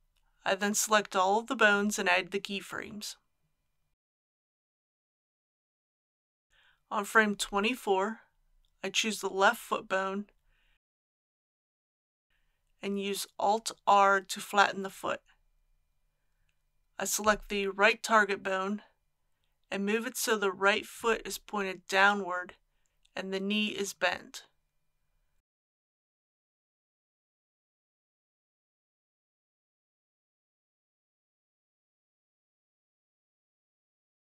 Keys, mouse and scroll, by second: 0.3 i, 0.9-7.1 drag, 13.1 alt+r, 16.8 click, 18.7-21.1 middle drag, 21.5 KP_3, 24.6 g, 28.2 click, 28.8 r, 32.9 g.